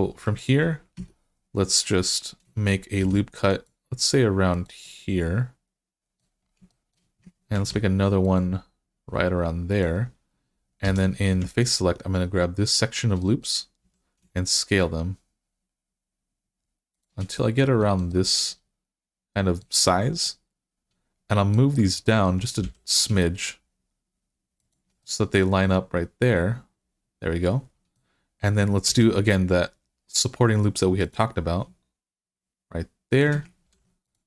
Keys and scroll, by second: 0.8 Tab, 2.8 ctrl+r, 7.4 ctrl+r, 10.7 3, 13.7 s, 22.5 g, 28.7 ctrl+r, 33.5 ctrl+r.